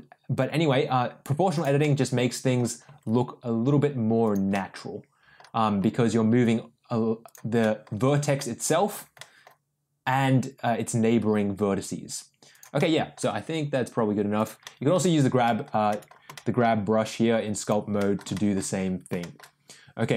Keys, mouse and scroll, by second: 1.8 middle click, 2.8 g, 4.5 middle click, 5.8 g, 7.6 middle click, 8.3 middle click, 9.2 middle click, 10.2 g, 12.7 middle click, 13.2 g, 14.6 middle click, 15.4 middle click, 15.9 middle click, 16.3 middle click, 17.5 click, 17.9 middle click, 18.3 shift+middle click, 19.1 shift+middle click.